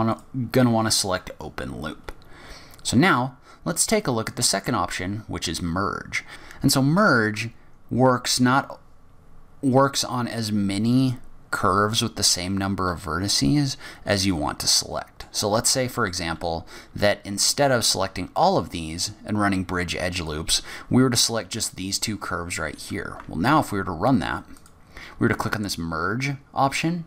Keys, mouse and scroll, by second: 6.3 ctrl+z, 6.3 middle click, 6.3 scroll up 7, 6.3 a, 14.3 middle click, 20.2 click, 23.4 ctrl+e.